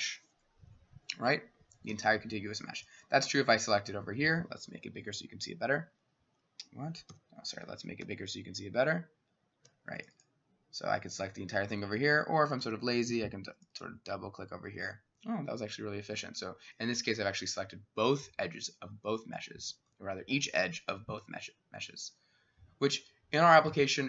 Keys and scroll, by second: 0.9 Escape, 1.9 s, 4.0 Escape, 4.7-6.0 ], 7.1 s, 8.1-16.3 ], 12.0 Escape, 12.6 s.